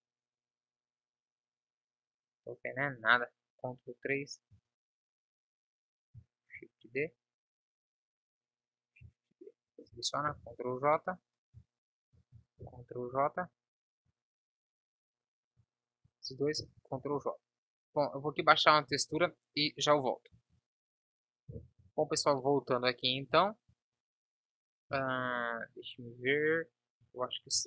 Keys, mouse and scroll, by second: 2.7 KP_1, 3.7 ctrl+KP_3, 4.8 z, 6.6 shift+d, 10.5 ctrl+j, 13.1 ctrl+s, 14.3 a, 16.8 ctrl+j, 19.2 ctrl+s, 23.9 Tab, 27.3 a.